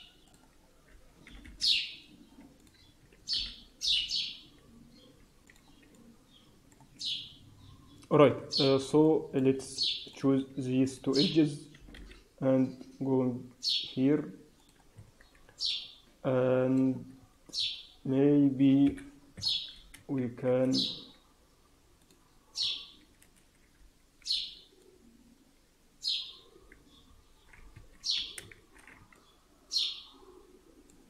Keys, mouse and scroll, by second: 0.5 scroll up 2, 1.1 g, 2.9 s, 5.9 alt+middle click, 8.1 click, 8.9 alt+middle click, 9.5 scroll up 2, 10.0 click, 10.8 shift+click, 11.7 g, 14.9 Tab, 14.9-15.6 scroll down 5, 15.6 middle click, 17.1 Tab, 17.5 Tab, 18.8 KP_1, 19.3 Tab, 19.3-19.9 scroll up 4, 20.1 shift+z, 21.9 click, 22.5 a, 23.3 alt+a, 24.2 b, 26.5 b, 28.5 shift+z, 29.1 alt+middle click.